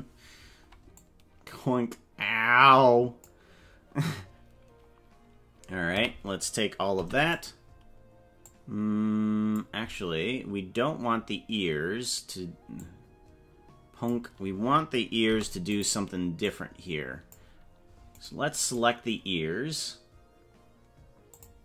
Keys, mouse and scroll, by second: 1.0-3.3 drag, 5.9 a, 7.1 i, 8.4-9.5 drag, 12.9-14.1 drag, 16.4-17.5 drag, 18.3 right click, 18.9 right click, 21.3 click.